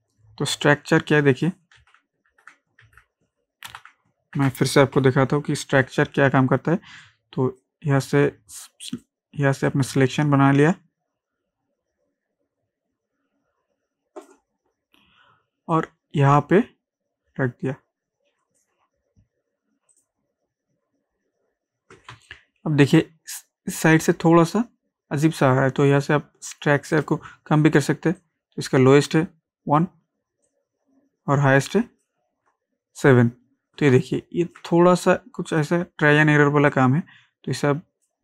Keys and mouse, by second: 0.1 ctrl+space, 1.8 ctrl+z, 5.0 F12, 7.0-19.9 drag, 22.1 ctrl+space, 22.3 ctrl+click, 22.7 ctrl+space, 27.0 ctrl+space, 33.9 ctrl+space, 34.0 ctrl+click, 34.4 ctrl+space, 35.5-38.2 drag.